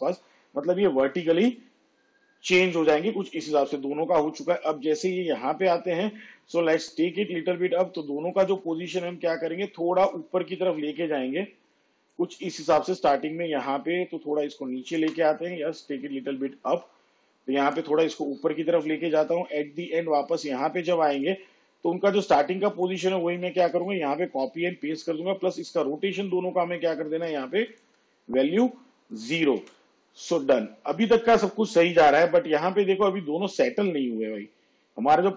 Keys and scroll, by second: 14.4 space, 23.5 ctrl+c, 23.8 ctrl+v, 29.6 0.